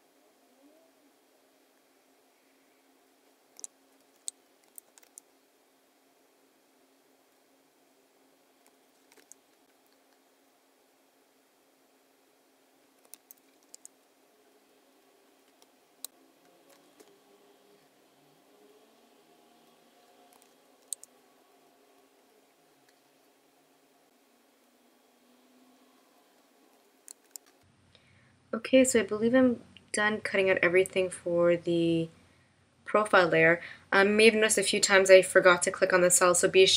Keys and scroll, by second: 4.1 super+F9, 13.6 super+F9, 15.6 space, 20.8 super+F9, 27.2 shift+m.